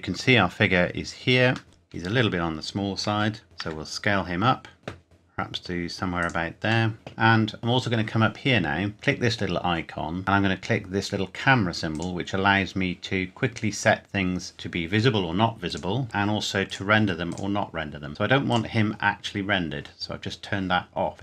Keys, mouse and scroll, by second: 0.7 scroll down 1, 2.2-2.9 scroll up 1, 3.1 KP_7, 3.6 s, 4.8 click, 5.0 s, 6.2 click, 6.9 middle click, 7.6 click, 8.9 click, 11.9 click, 15.6 click.